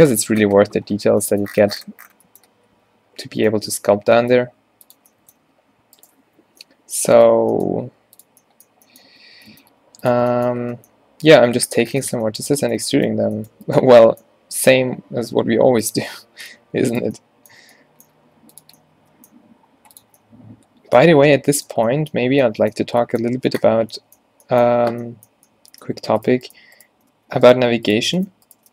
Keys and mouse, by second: 0.0 ctrl+z, 4.6 e, 5.5 g, 6.5 o, 7.8 g, 9.1 Tab, 9.5 Tab, 9.7 g, 10.2 Tab, 11.8 Tab, 15.2 e, 16.7 g, 18.2 g, 19.7 g, 21.2 g, 26.3 right click, 27.2 f.